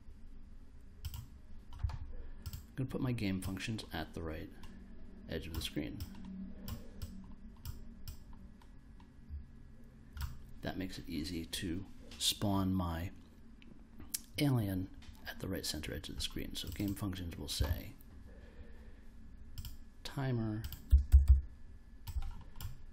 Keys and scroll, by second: 20.6-21.7 typing.